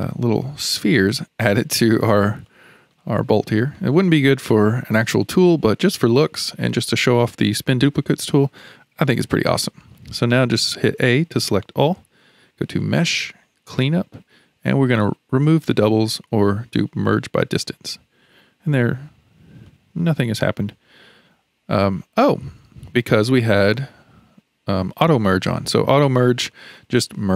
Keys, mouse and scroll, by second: 2.5-4.0 shift+middle drag, 4.0 scroll up 2, 4.3-10.9 middle drag, 10.9 a, 11.5-12.8 middle drag, 12.8-15.9 drag, 19.7-21.7 middle drag, 21.7-25.0 scroll up 3, 26.5 middle click.